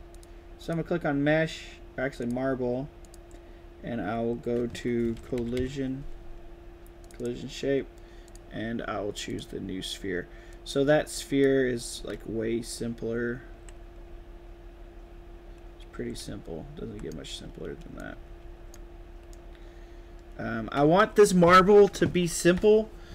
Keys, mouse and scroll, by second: 0.0 click, 0.5 click, 2.1 click, 2.9 click, 6.9 click, 7.1 click, 8.2 click, 9.2 click, 10.4-11.3 drag, 11.8-17.0 right drag, 11.8 a, 14.0 d, 15.9 a, 18.0 right click, 18.0 d, 18.4 s.